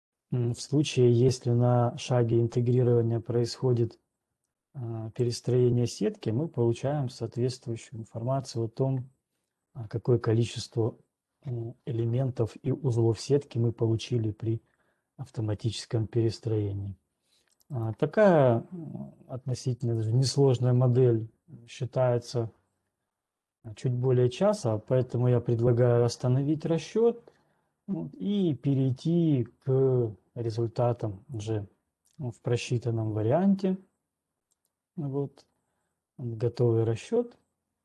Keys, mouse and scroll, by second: 4.6 right click, 5.6 click, 8.6 click, 18.4 right click, 20.1 click, 27.7 scroll, 30.7-32.1 scroll, 32.1 alt+Tab, 35.3 alt+click.